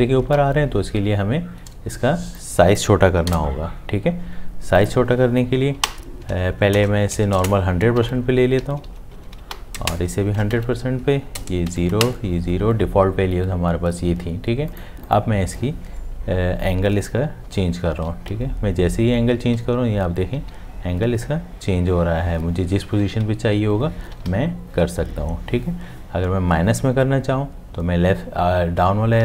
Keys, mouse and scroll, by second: 0.3 ctrl+z, 3.3 0, 5.8 Left, 6.8 BackSpace, 8.0 Tab, 8.7 Left, 9.2 Right, 9.5 Delete, 10.6 Tab, 11.4 0, 11.7 Tab, 17.5 Up, 24.3 Down, 24.3 Up.